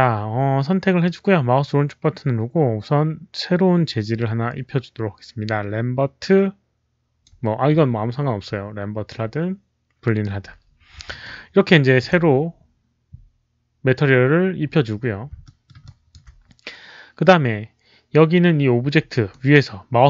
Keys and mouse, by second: 0.9-7.1 alt+right drag, 3.7 alt+click, 6.6 alt+click, 7.3 alt+click, 8.3 right click, 8.3 alt+click, 11.1 alt+click, 15.4 alt+middle click, 15.7 alt+click, 19.2-20.0 right drag.